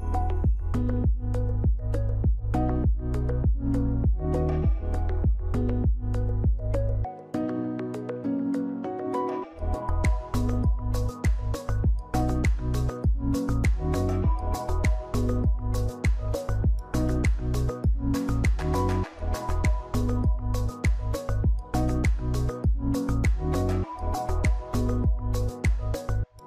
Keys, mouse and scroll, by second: 24.5 click.